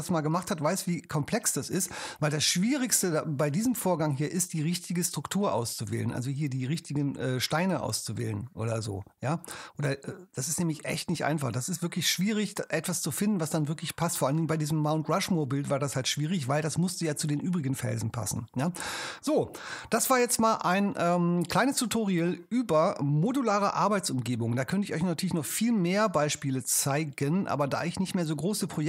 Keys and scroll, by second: 19.7 super+w.